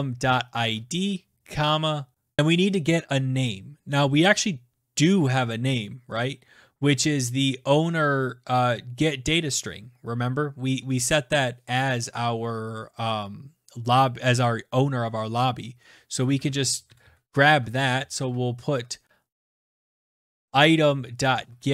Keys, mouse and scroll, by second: 0.0-2.9 typing, 16.2-18.8 typing, 19.9-21.7 typing.